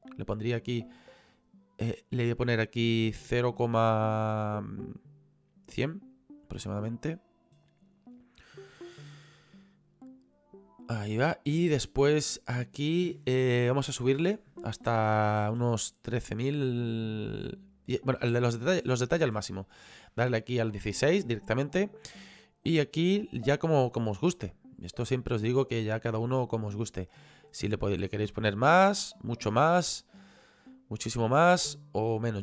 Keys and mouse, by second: 1.9 click, 13.8 click, 17.9 click, 22.4 click.